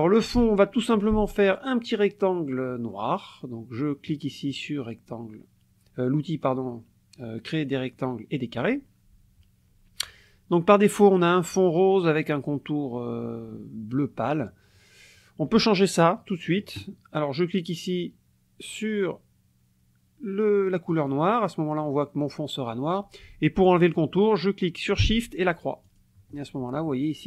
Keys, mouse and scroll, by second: 4.1 click, 20.9 click, 25.9 shift+click.